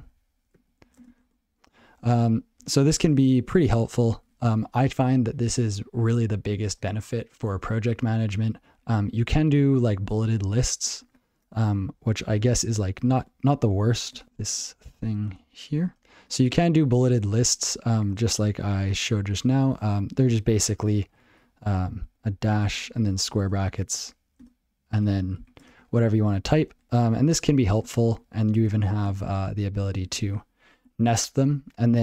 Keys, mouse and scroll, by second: 0.0 ctrl+j, 0.5 ctrl+/, 0.8 ctrl+n, 0.9 ctrl+space, 1.0 ctrl+n, 1.2 ctrl+w, 2.6 ctrl+g, 14.1-15.6 typing, 17.7 ctrl+g.